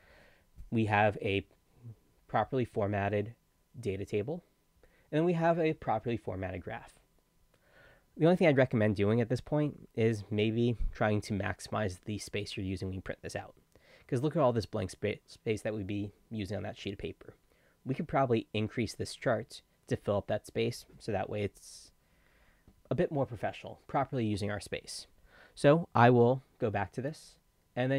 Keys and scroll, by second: 24.4 Escape.